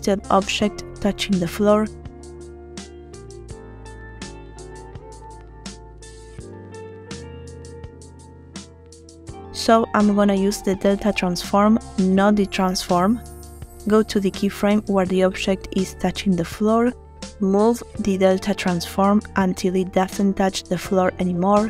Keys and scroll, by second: 2.3 space.